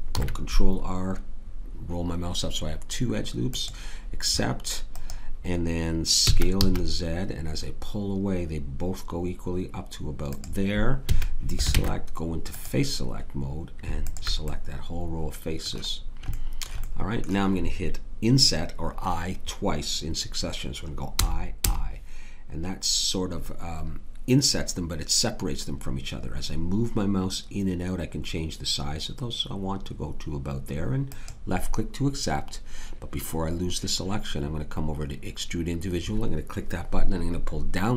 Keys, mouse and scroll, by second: 0.1 ctrl+r, 6.2 s, 11.0 a, 11.7 ctrl+Tab, 21.2 i.